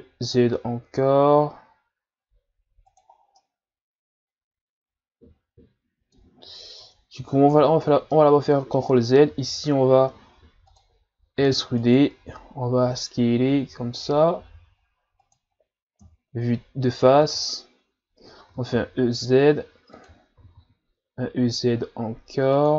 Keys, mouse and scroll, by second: 3.2 scroll down 1, 3.4-6.3 middle drag, 6.3 scroll up 2, 7.3 ctrl+z, 7.7 ctrl+z, 8.1-9.3 middle drag, 9.3 s, 16.0 KP_1, 17.3 z, 18.6 e, 20.4 e.